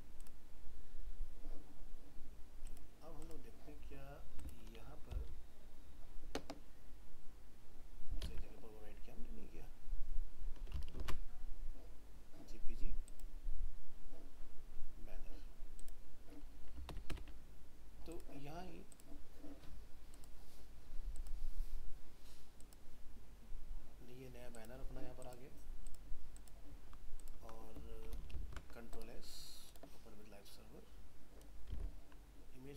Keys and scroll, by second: 8.2 alt+Tab, 11.0 ctrl+alt+shift+s, 28.3 ctrl+s, 31.8 alt+Tab.